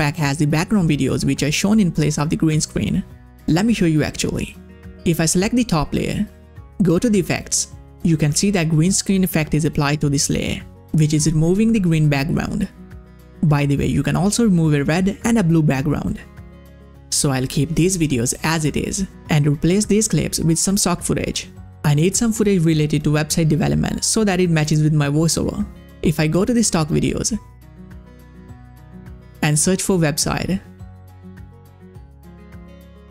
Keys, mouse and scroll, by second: 3.7 click, 12.5 click, 15.9 click, 17.6 click, 26.6 click, 27.7-28.4 scroll down 1, 28.4 click, 30.1 click, 30.8-32.2 typing.